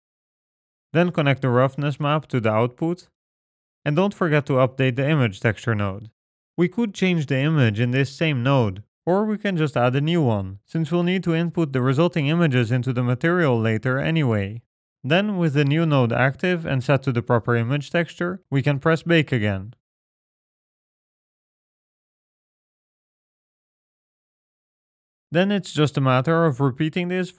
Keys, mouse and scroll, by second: 2.9 click, 4.3 middle click, 5.3-6.2 scroll up 6, 5.5 middle click, 6.2 middle click, 8.3 click, 9.4 shift+d, 13.8 click, 19.6 click, 22.8 click.